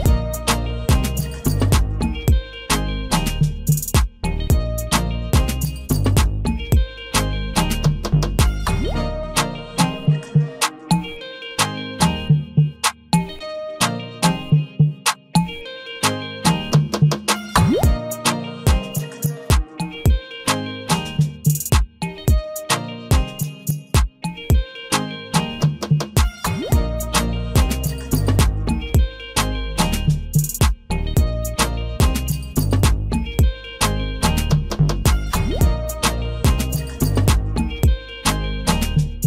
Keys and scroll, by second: 3.6 ctrl+v, 5.5 ctrl+v, 7.1 ctrl+v, 9.1 ctrl+v, 13.0 ctrl+v, 15.1 ctrl+a.